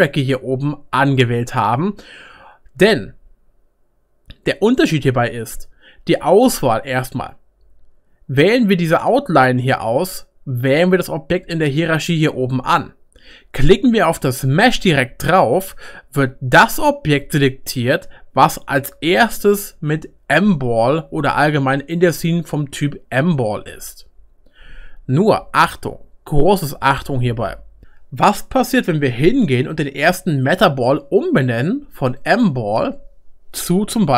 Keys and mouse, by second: 23.2-33.9 middle drag, 27.8 click, 27.8 BackSpace, 32.3-33.9 drag.